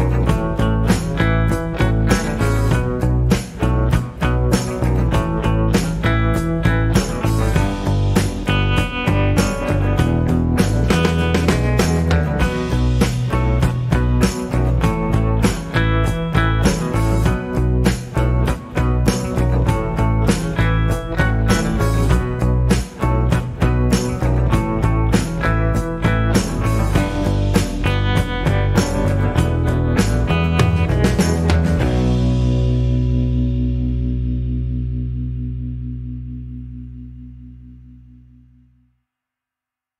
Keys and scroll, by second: 2.6 alt+a, 3.7 Escape, 19.4 ctrl+f, 20.2 ctrl+g, 21.4 Tab, 23.1 g, 24.9 Tab, 30.1 shift+Left.